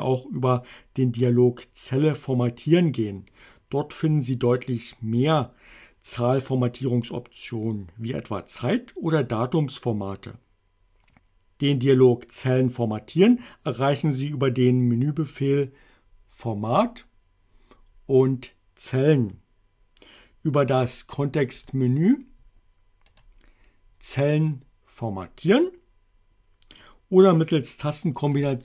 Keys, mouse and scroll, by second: 16.7 click, 21.6 click, 23.1 right click, 28.4 click.